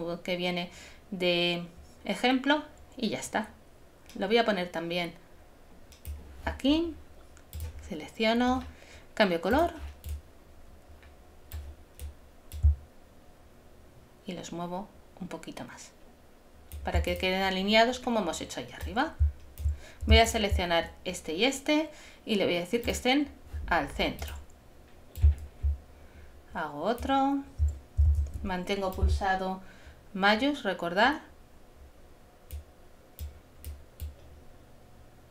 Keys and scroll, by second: 28.1 shift+super+z, 28.7 super+z.